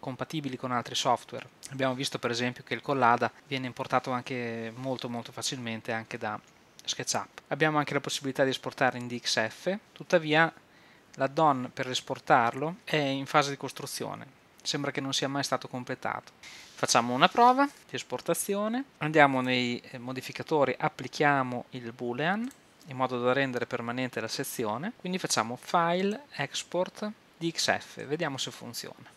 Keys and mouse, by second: 9.8 ,, 16.8-18.9 middle drag, 18.9 ctrl+Up, 19.8-21.2 drag, 22.5-24.9 drag, 26.0-27.2 drag.